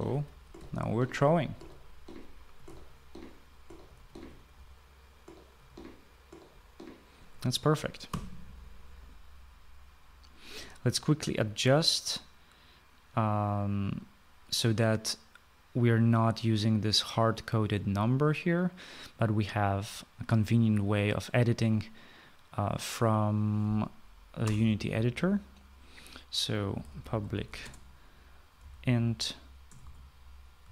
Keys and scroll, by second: 0.0-7.0 typing, 8.2 typing, 8.7 Escape, 25.0 Return, 27.0-30.7 typing.